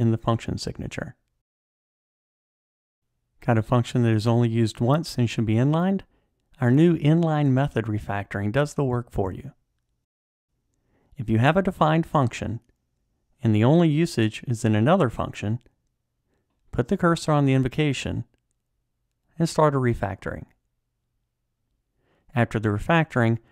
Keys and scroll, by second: 19.3 ctrl+alt+t, 22.6 alt+super+n.